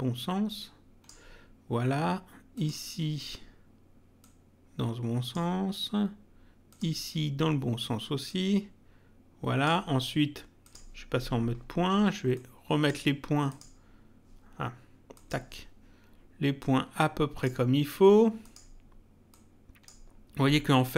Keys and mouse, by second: 2.5 click, 4.2 click, 6.7 click, 8.2 click, 10.6 click, 12.3 click, 13.4 click, 15.1 click, 16.6 click, 18.4 click.